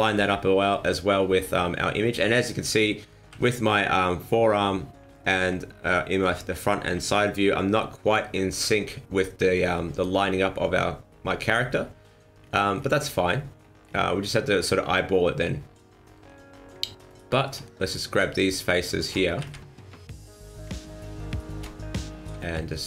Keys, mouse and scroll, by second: 3.3 KP_1, 5.3 KP_3, 6.2 KP_1, 6.9 KP_3, 11.6 scroll down 4, 12.4-12.7 scroll up 4, 12.7-13.8 scroll down 7, 13.8-14.6 scroll up 6, 17.0 alt+right click, 17.8 alt+shift+right click, 18.5 alt+shift+right click, 19.4 ctrl+z, 21.2 alt+shift+right click, 22.2 r.